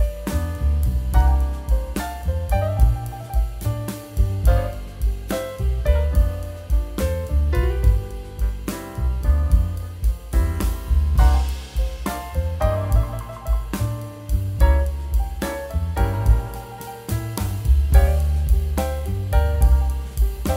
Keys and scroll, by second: 2.3 super+x, 2.7 super+z, 4.8 super+x, 5.4 super+d, 6.3 super+x, 6.4 super+z, 7.9 super+z, 8.7 super+z, 9.5 super+x, 9.7 super+z, 12.0 super+x, 12.1 super+z, 13.1 super+x, 13.2 super+z, 14.5 super+z, 16.7 super+x, 17.3 super+x, 17.7 super+d, 18.8 super+x, 19.6 super+x.